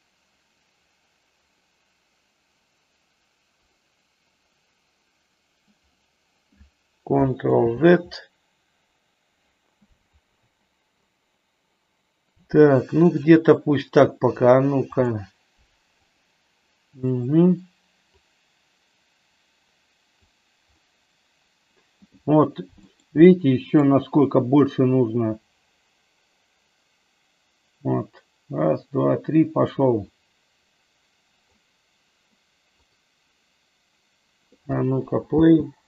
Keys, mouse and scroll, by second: 9.9 ctrl+z, 15.2-16.3 drag, 18.2-20.3 drag, 22.9-23.8 middle drag, 25.1-31.7 drag, 32.8 click, 35.3 space.